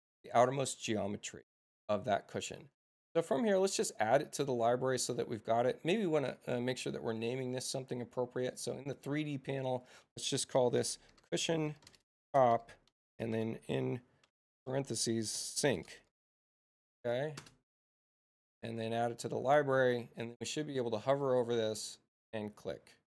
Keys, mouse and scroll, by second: 6.1 click, 8.5 click, 9.5 click, 10.5-16.2 typing, 17.3 Return, 19.4 click, 21.1 click.